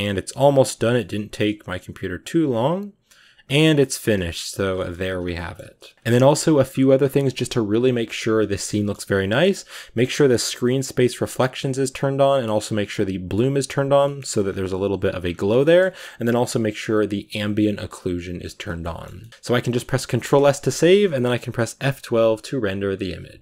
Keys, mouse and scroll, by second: 0.4 click, 0.8-2.1 shift+middle drag, 2.1 scroll up 1, 3.3-5.2 scroll down 12, 3.7 shift+middle drag, 4.1 shift+middle click, 4.6-5.0 shift+middle drag, 5.2-14.1 shift+middle drag, 14.1-15.0 scroll up 7, 15.0-15.4 scroll down 4, 15.4-18.5 shift+middle drag, 18.5 scroll down 3, 18.6-19.3 shift+middle drag, 19.3-20.0 scroll down 1, 20.0-22.6 scroll down 1, 22.6-23.4 scroll down 1.